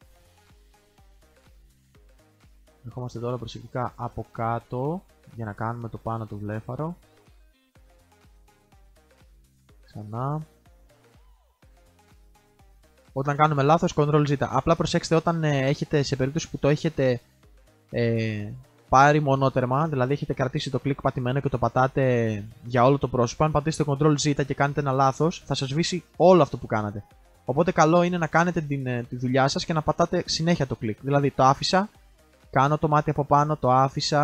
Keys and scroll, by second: 8.9 ctrl+alt+z.